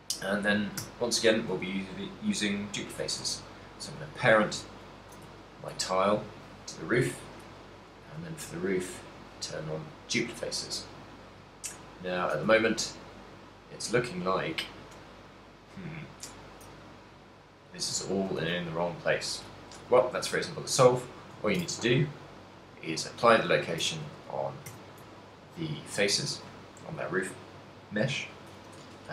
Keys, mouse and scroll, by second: 0.0 right click, 1.1 shift+right click, 3.3 ctrl+p, 5.5 shift+middle click, 5.8 a, 6.2 right click, 8.1 click, 9.0 click, 10.7 middle click, 12.7 ctrl+middle click, 13.4 middle click, 15.2 middle click, 15.9 middle click, 17.1 middle click, 18.1 ctrl+middle click, 18.5 ctrl+middle click, 18.5 a, 18.7 middle click, 20.1 right click, 21.0 middle click, 21.7 ctrl+a, 23.6 shift+middle click, 24.8 a, 25.9 middle click, 26.5 right click, 27.3 middle click.